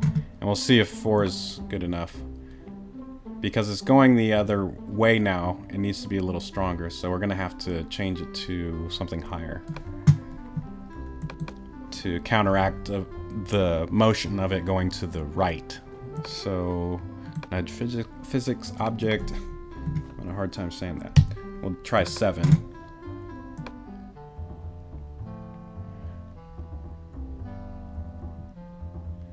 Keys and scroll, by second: 21.2 7.